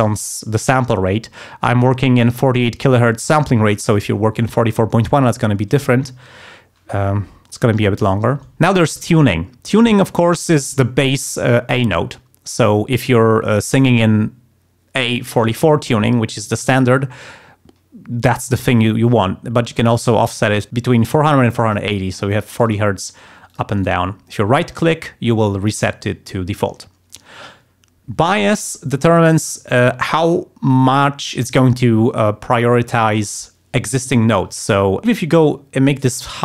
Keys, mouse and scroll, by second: 18.5-21.9 drag, 22.5 click, 23.5 click, 23.7 right click, 35.0-36.4 drag.